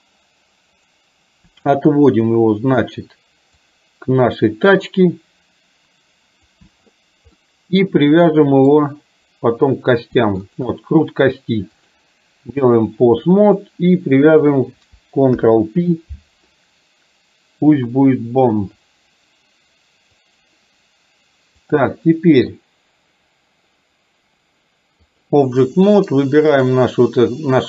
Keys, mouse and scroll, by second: 1.9-2.9 drag, 3.7-6.7 drag, 7.5-8.8 middle drag, 10.4 shift+click, 11.9-12.9 drag, 14.5 click, 15.3 ctrl+p, 21.8-25.4 drag, 25.8 middle click, 26.7 click.